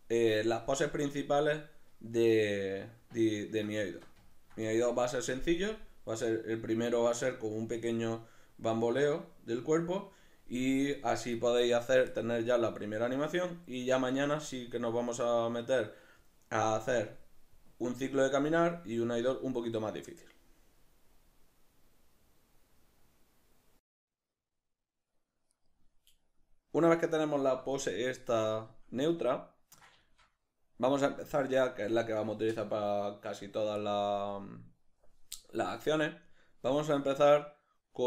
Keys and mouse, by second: 2.9-25.6 ctrl+middle drag, 25.6 right click, 27.0 right click, 29.3-38.0 ctrl+middle drag.